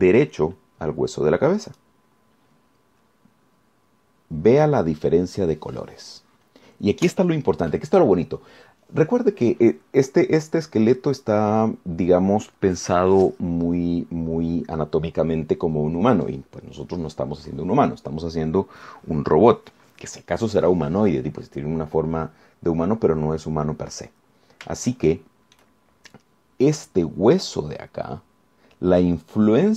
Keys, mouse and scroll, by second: 2.9 click, 5.7-6.0 scroll up 2, 12.6-12.9 scroll down 2, 23.2-23.6 scroll up 2, 26.1 shift+right click.